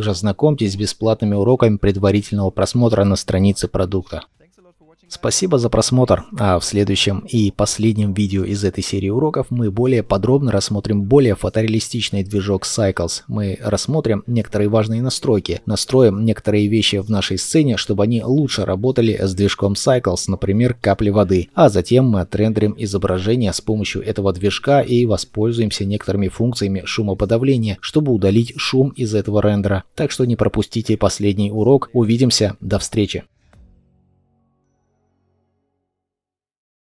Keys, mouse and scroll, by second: 13.2 middle click, 16.1 double click, 20.9 middle click.